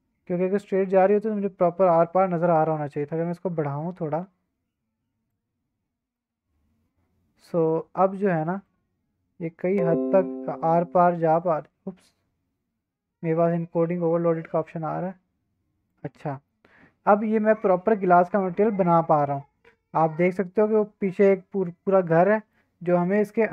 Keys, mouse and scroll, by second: 0.3 drag, 0.5-1.1 middle drag, 2.4-5.3 drag, 6.1-8.7 middle drag, 10.6-12.9 drag, 20.2-21.2 shift+middle drag, 22.5-23.2 shift+middle drag.